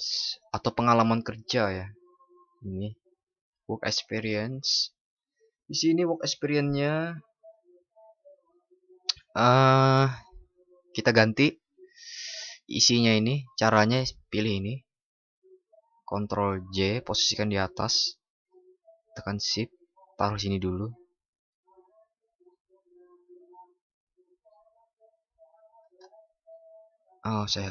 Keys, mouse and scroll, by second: 15.8 ctrl+?, 16.6 ctrl+shift+i.